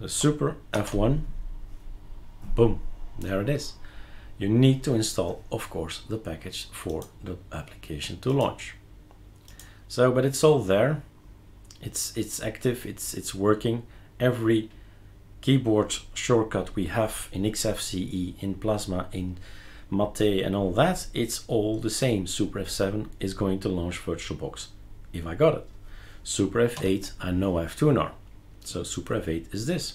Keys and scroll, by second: 0.7 super+F1, 26.7 super+F8.